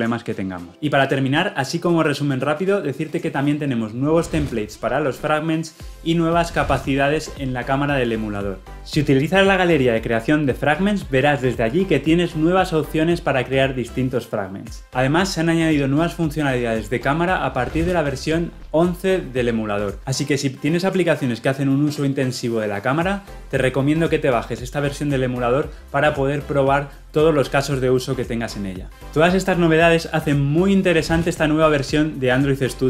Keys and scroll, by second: 9.6 Right, 10.2 Down, 11.9 Left, 12.4 Down, 13.1 Right.